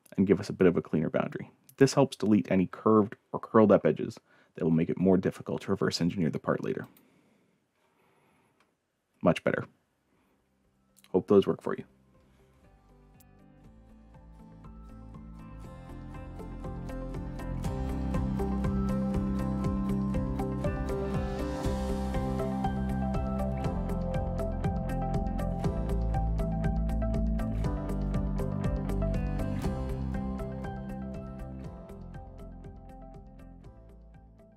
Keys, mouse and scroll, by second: 6.8 click, 13.2-18.2 drag.